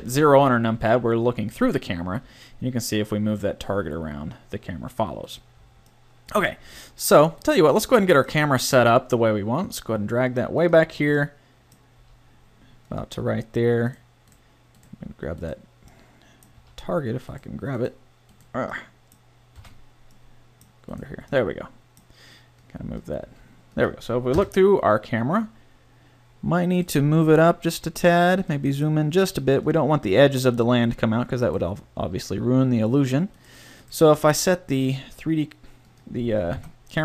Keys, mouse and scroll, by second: 2.1 g, 7.4 middle click, 8.8 g, 12.0 g, 16.6 a, 19.6 a, 22.6 middle click, 23.3 g, 24.3 KP_0, 27.1 g, 28.5 middle click, 28.6 g, 32.0 g, 34.3 g, 36.5 KP_7.